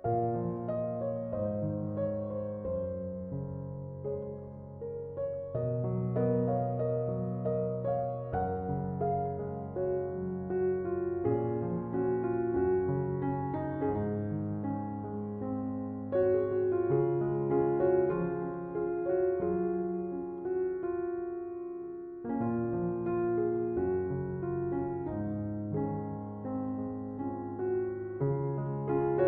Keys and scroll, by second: 5.1 BackSpace.